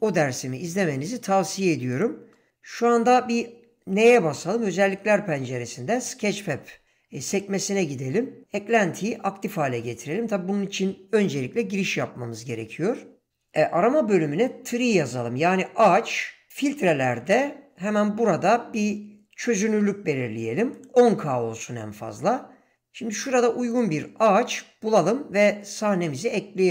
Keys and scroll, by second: 3.1 n.